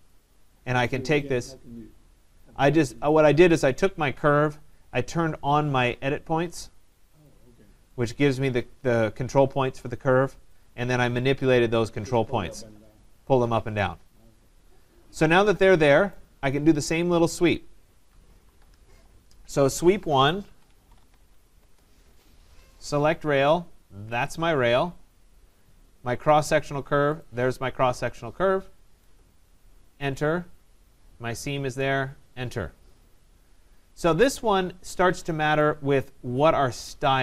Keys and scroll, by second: 18.2 Escape, 21.5 Return, 29.0 Return.